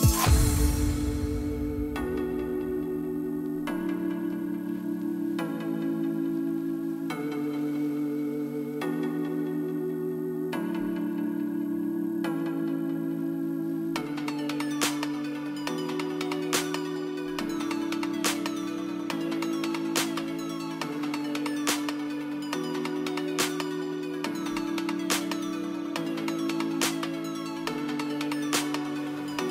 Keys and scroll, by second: 25.9 KP_5, 26.0 KP_0, 26.1 KP_0, 26.7 Return.